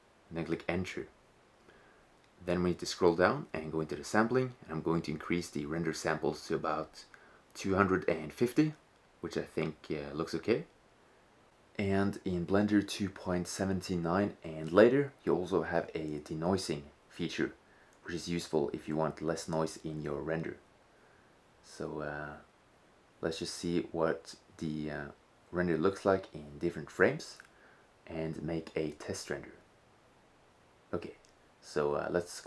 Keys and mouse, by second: 2.4-3.3 middle drag, 3.3-5.3 drag, 5.3 middle click, 6.2-8.1 drag, 14.3-22.5 drag, 32.3 click.